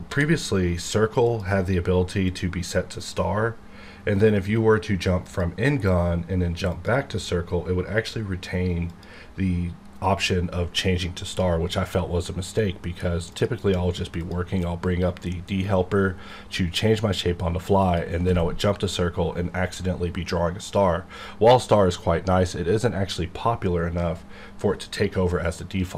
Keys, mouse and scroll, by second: 0.0 d, 1.2 click, 5.2 click, 8.9 click, 11.2 click, 17.8 click.